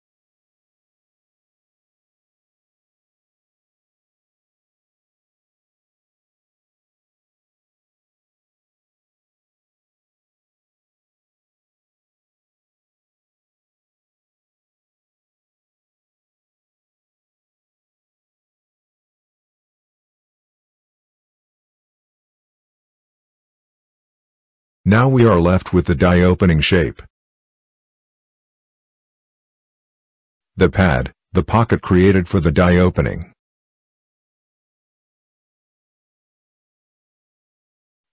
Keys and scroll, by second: 0.2 Delete, 6.3 Delete, 10.6 Delete, 16.8 Delete.